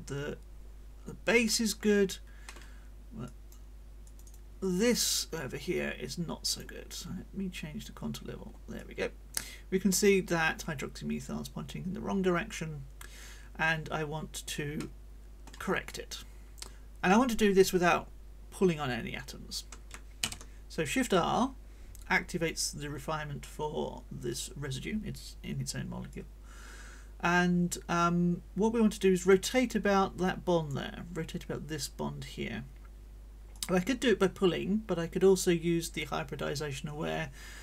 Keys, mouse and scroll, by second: 2.4 middle click, 3.2 click, 4.0 click, 4.6 middle click, 5.1-6.8 drag, 5.1-6.8 right drag, 6.9 scroll up 1, 7.7 scroll down 1, 8.2 scroll up 2, 8.8-14.7 drag, 14.8-15.6 scroll up 1, 15.8-19.7 drag, 20.2 shift+r, 26.1-30.8 drag, 33.5-37.6 drag.